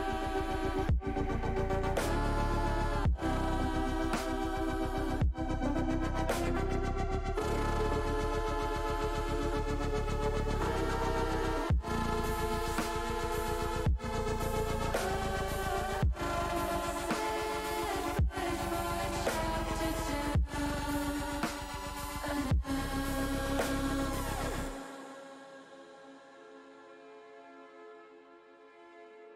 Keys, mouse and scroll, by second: 0.6 ctrl+z, 1.0 middle click, 1.8-3.3 drag, 4.0-5.7 drag, 6.1 middle click, 7.0 middle click, 7.4 middle click, 8.4 middle click, 10.2-12.6 drag, 13.3-14.6 drag, 15.1 middle click, 15.8 middle click, 16.9 click, 17.9 middle click, 19.2 Tab, 19.6 middle click, 20.1 middle click, 21.2 Tab, 23.3 middle click, 24.6 middle click, 26.4 ctrl+r, 27.6 click, 28.2 middle click.